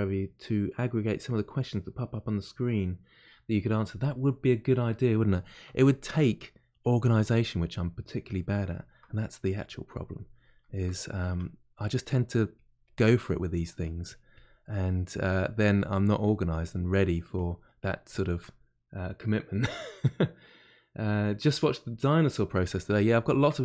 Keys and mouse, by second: 6.7-7.7 drag, 7.7-9.3 middle drag, 9.3-10.6 drag, 10.6-12.5 shift+middle drag, 12.5 click, 13.2 middle click, 13.8 click, 14.7 middle click, 15.2-16.8 drag, 16.8 middle click, 17.3 click, 17.6 middle click, 18.1-20.5 shift+drag, 20.5-22.9 middle drag, 22.9 shift+click, 23.5-23.6 middle drag.